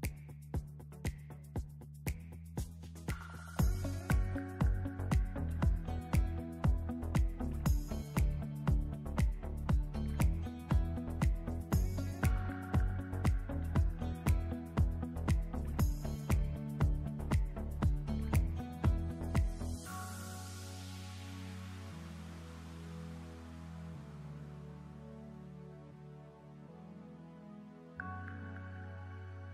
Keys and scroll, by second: 2.3 ctrl+c, 3.9 ctrl+shift+v.